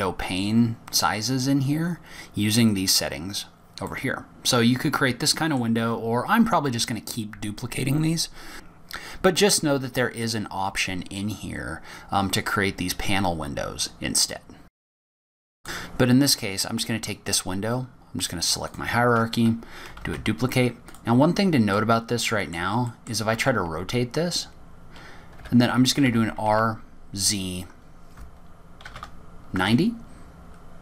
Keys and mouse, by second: 5.3-7.0 middle drag, 14.8 click, 15.3 drag, 15.6 click, 18.4-20.2 drag, 21.4 shift+d, 23.2-24.0 drag, 24.3 click, 24.7 r, 27.4 r.